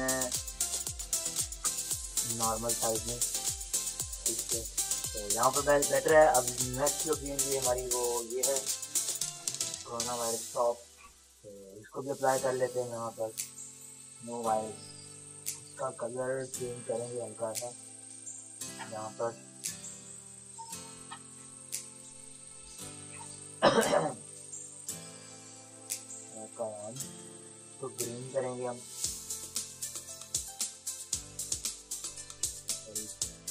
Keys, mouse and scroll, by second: 0.3 ctrl+t, 1.4 shift+click, 2.4 Return, 5.2 ctrl+-, 6.3 click, 7.8 click, 9.2 Escape, 15.3 Return, 16.7-18.6 drag, 18.6 Delete, 20.1 Escape, 20.2 b, 20.4 click, 20.8 Return, 21.0 Delete, 21.8 d, 23.8 click, 32.1 Escape, 33.0 u.